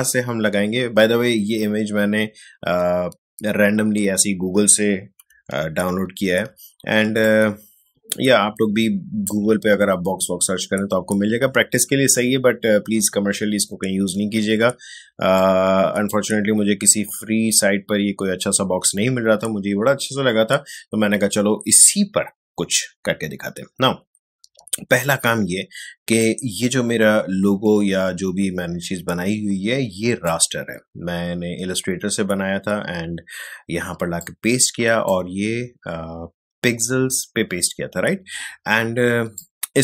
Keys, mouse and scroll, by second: 5.8 ctrl+1, 7.0 space, 7.2 click, 7.5 space, 14.9 space, 15.3 ctrl+click, 15.5 ctrl+space, 25.0-32.6 drag, 34.2-37.5 drag, 39.3-39.8 drag.